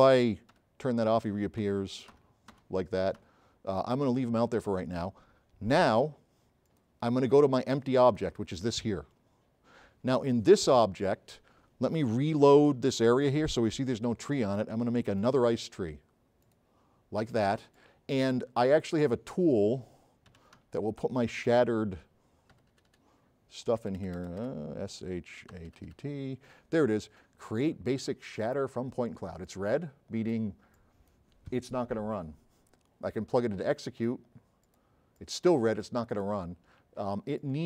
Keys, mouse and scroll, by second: 0.6 h, 1.7 h, 2.2 h, 2.6 h, 3.3 h, 6.7 click, 8.1 click, 13.1 click, 17.8-18.1 drag, 18.9 click, 20.1-21.2 typing, 22.5-24.0 typing, 25.4-26.3 typing, 27.7 click, 28.8 drag, 29.3 click, 30.4 drag.